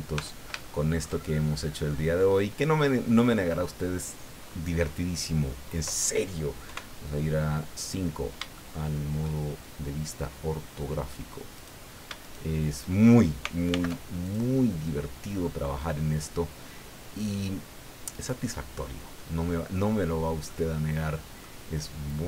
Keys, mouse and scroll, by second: 0.1 Tab, 0.6 shift+middle click, 1.2 shift+middle click, 1.3 shift+click, 2.1-2.5 scroll up 2, 2.8-3.8 scroll up 6, 4.4-4.8 scroll up 2, 4.9 scroll up 2, 5.2-5.9 scroll down 4, 6.6 KP_5, 7.5-8.0 scroll down 2, 8.5 shift+click, 9.5-10.2 shift+scroll up 5, 11.5 right click, 12.2 shift+right click, 13.7 alt+m, 14.3 alt+click, 15.3-15.6 scroll down 2, 18.1 right click, 20.1 scroll down 2, 20.5-21.6 middle drag.